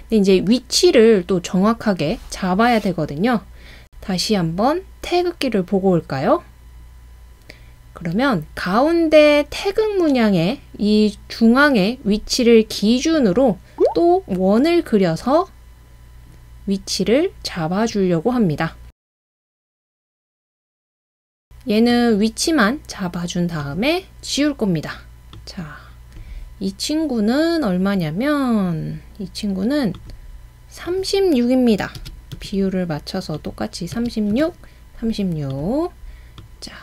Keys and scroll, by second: 32.0-32.4 typing, 34.0-34.4 typing.